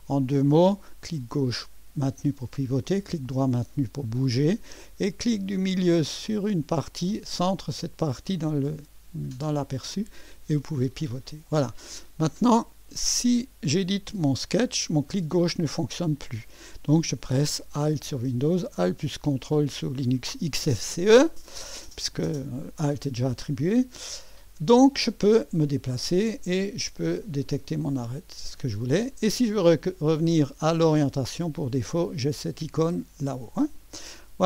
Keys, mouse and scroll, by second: 0.0-0.7 scroll up 2, 0.7-2.5 drag, 2.9-4.7 middle drag, 4.7 right click, 7.4-11.4 drag, 13.0 click, 15.1-16.1 drag, 25.1 click, 26.6 middle click, 27.0-29.9 right drag, 31.0 click.